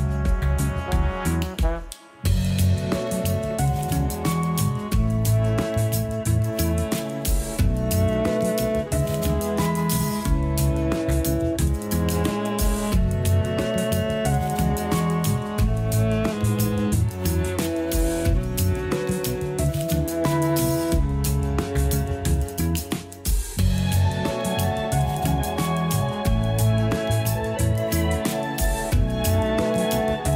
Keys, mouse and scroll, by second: 16.0-17.0 scroll down 6, 17.0 scroll up 1, 17.4 a, 17.6 a, 17.9 scroll up 3, 20.7 click, 24.0-27.0 drag.